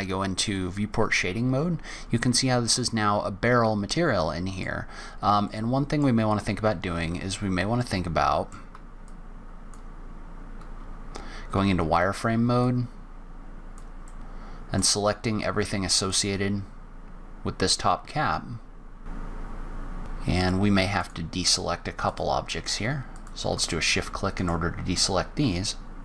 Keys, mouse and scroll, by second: 0.4 click, 2.3 middle click, 4.8 scroll up 2, 5.4 middle click, 7.7 middle click, 9.1 click, 10.7 z, 12.0-12.6 scroll up 2, 12.6 click, 14.0 middle click, 15.3 click, 19.2 click, 19.5 middle click, 20.0 shift+click, 20.3 shift+click, 20.9 shift+click, 22.0 shift+click, 23.1 shift+click, 23.6 middle click, 24.6-25.1 scroll down 3, 25.1-26.0 scroll up 3.